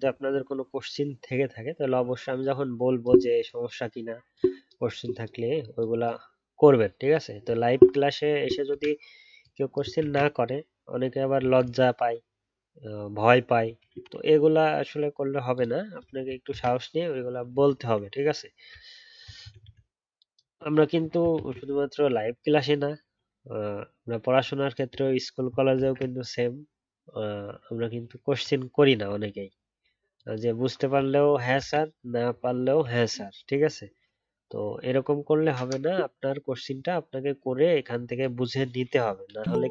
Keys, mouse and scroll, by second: 8.7 ctrl+z, 10.0 ctrl+z, 16.5 ctrl+z, 21.3 ctrl+z, 25.7 ctrl+z, 31.6 ctrl+z, 39.3 ctrl+z.